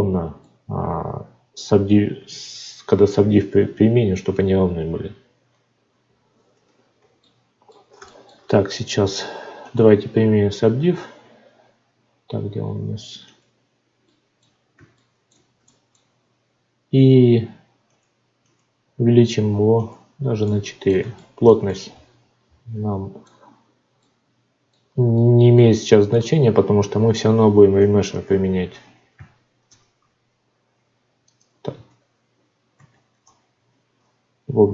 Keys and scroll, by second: 6.0 F9, 29.6 alt+v, 32.7 ctrl+z, 33.2 Tab.